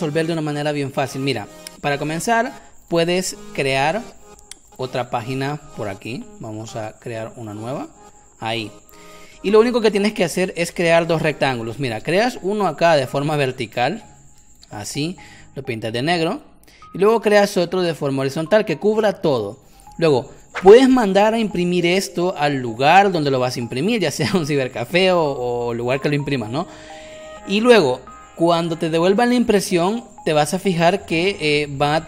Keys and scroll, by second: 3.5 Caps_Lock, 3.8 shift+o, 9.6 v, 10.5 space, 11.9 m, 19.9 v, 20.5 v, 21.7 space.